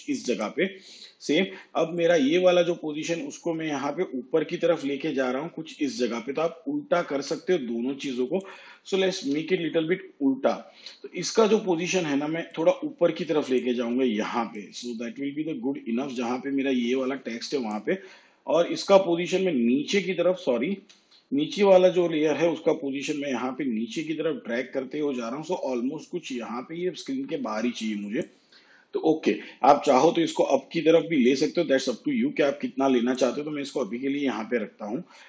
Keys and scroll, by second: 9.0 ctrl+z, 20.7 ctrl+z.